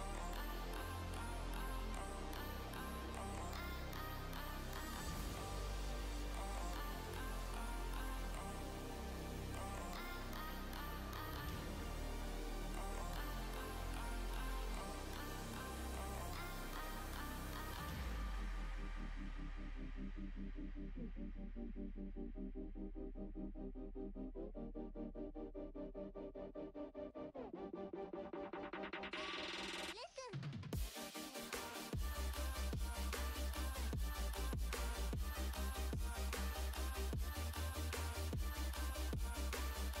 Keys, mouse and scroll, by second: 3.5 b, 11.2 b, 11.3 b, 12.2 b, 17.2 b, 17.8-20.9 middle drag, 22.6-26.7 middle drag, 29.7 e, 34.7 e, 35.2-40.0 middle drag.